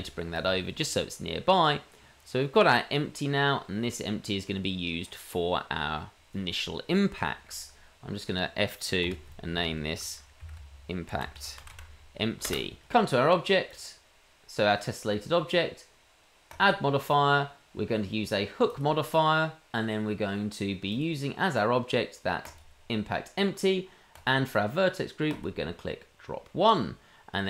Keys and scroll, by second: 9.0 F2.